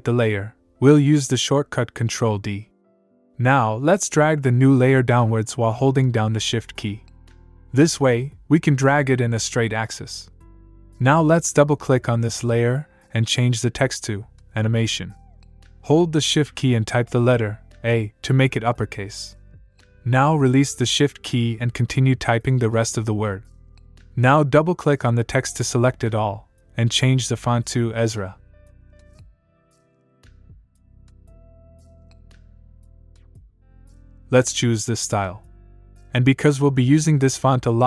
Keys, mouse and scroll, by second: 2.1 ctrl+d, 11.3 click, 15.7 shift+Num_Lock, 17.9 shift+a, 21.6-23.7 typing, 25.8 click, 29.1 click, 30.3-31.7 typing, 35.2 click, 37.3 click.